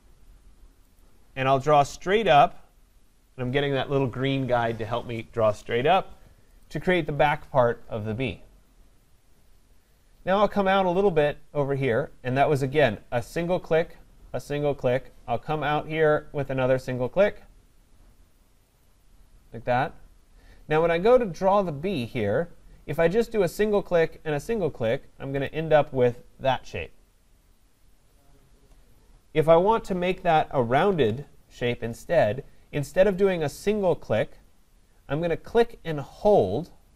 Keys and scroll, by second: 30.3 ctrl+z.